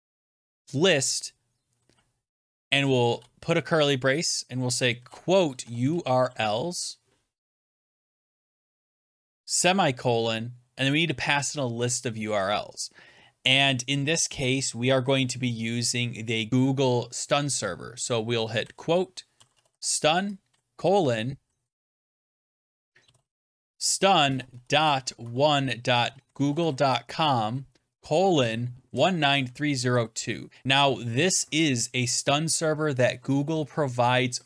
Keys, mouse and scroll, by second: 2.7-3.4 typing, 4.6-6.6 typing, 7.8 Right, 8.3-9.0 typing, 10.9-11.7 typing, 18.5-30.3 typing.